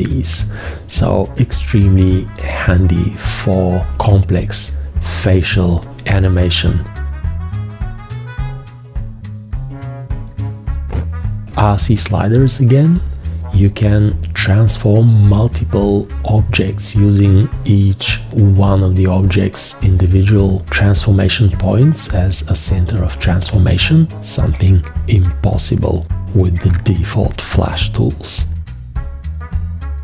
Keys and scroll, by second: 3.3 4.